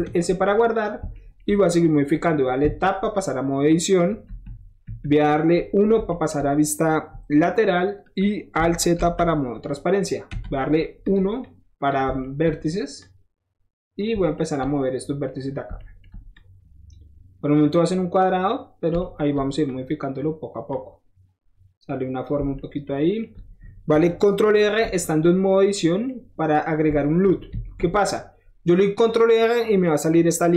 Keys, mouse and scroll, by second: 0.7 click, 1.1 shift+middle drag, 2.6 Tab, 4.2 KP_1, 4.8 KP_3, 6.0 shift+middle click, 8.9 alt+z, 10.6 middle click, 10.7 middle click, 11.0 click, 11.4 click, 12.2 shift+middle click, 13.0 shift+click, 14.1 shift+middle click, 14.5-15.7 shift+middle drag, 16.0 shift+middle click, 16.3 shift+click, 16.9 shift+middle click, 17.6-18.8 shift+drag, 18.8 shift+middle click, 19.6 shift+click, 20.7-22.2 shift+drag, 24.9 ctrl+shift+middle click, 27.4 ctrl+r.